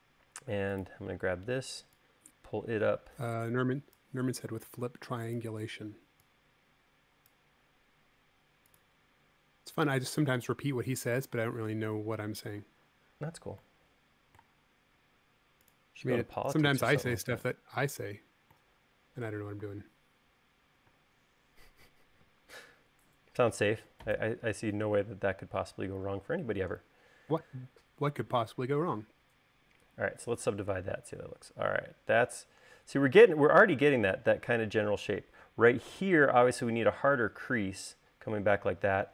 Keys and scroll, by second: 21.2 space, 30.9 u.